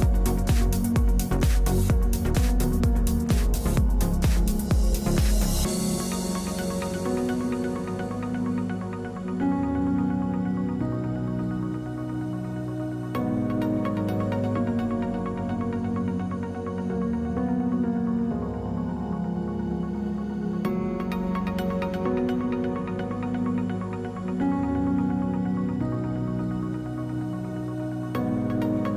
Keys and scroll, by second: 0.3 space, 0.7 space, 10.2 r, 11.1 e, 14.3 space, 15.1 space.